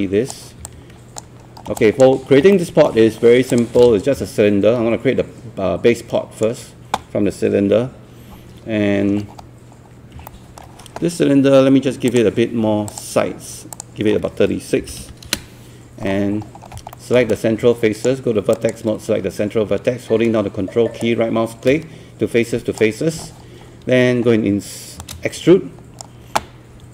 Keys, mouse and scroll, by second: 1.5 scroll up 1, 1.6 scroll down 1, 1.8 alt+click, 2.2 scroll up 1, 2.5 alt+middle click, 3.5 click, 4.5-6.5 shift+right drag, 9.2 scroll up 1, 9.8-10.2 scroll down 1, 10.3-11.5 alt+middle drag, 12.1 click, 14.8 KP_3, 15.0 KP_6, 16.2 scroll up 1, 16.9 alt+middle click, 17.3-18.5 right drag, 18.8 click, 21.0-23.5 ctrl+right drag, 25.5-26.5 shift+right drag.